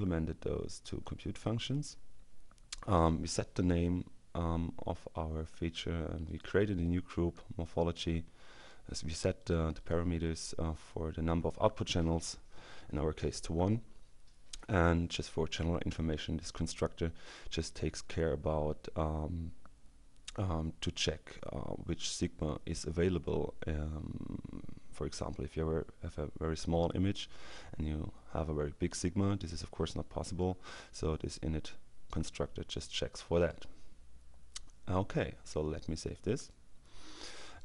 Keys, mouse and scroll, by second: 4.8-6.9 drag, 8.6-10.5 drag, 33.4 click, 36.4 click, 37.3 click.